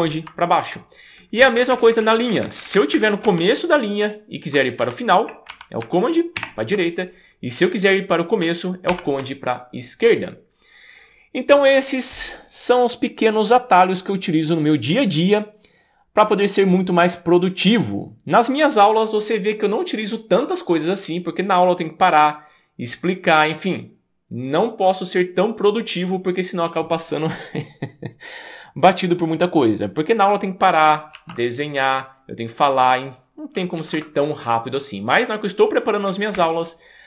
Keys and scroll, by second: 0.0 super+Down, 1.4 Up, 1.6 Up, 1.7 Up, 1.9 Up, 2.0 Up, 2.1 Up, 2.3 Up, 2.4 Up, 2.6 Up, 2.9 Up, 3.2 Left, 3.7 Left, 3.8 Left, 3.9 Left, 4.0 Left, 4.1 Left, 4.2 Left, 4.2 Left, 4.8 Left, 5.2 Right, 5.5 Left, 6.4 super+Right, 8.9 super+Left, 36.4 Up, 36.8 Up, 36.9 Up, 37.0 Up.